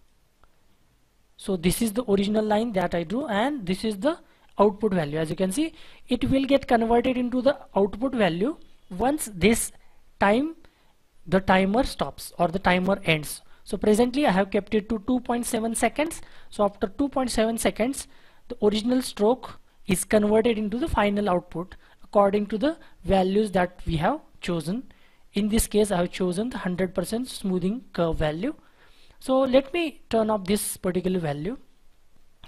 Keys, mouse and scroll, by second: 1.3-4.4 scroll down 1.